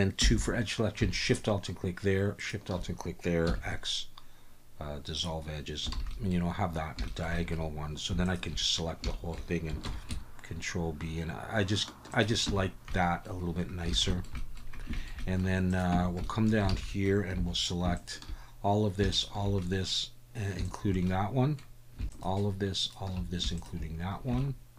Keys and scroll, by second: 0.2 2, 3.5 x, 5.9 alt+a, 9.8 ctrl+b, 12.5 Tab, 13.9 alt+a, 15.9 Tab, 16.7 alt+a, 17.3 2.